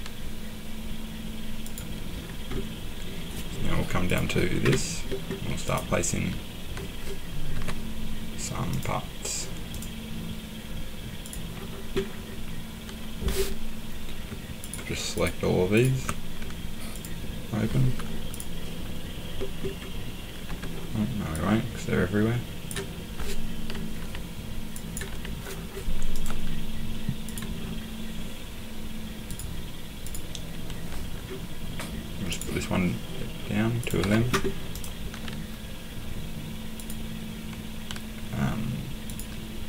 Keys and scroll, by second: 7.5 Escape, 20.5 Escape, 24.0 Delete, 25.1 Delete, 34.0 Escape.